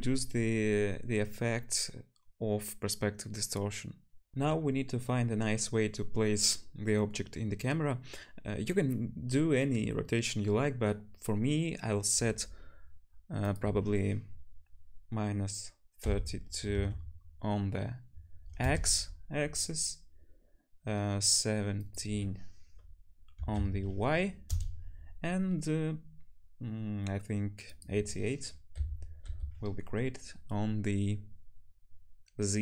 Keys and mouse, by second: 4.3-13.5 middle drag, 13.5-32.6 drag.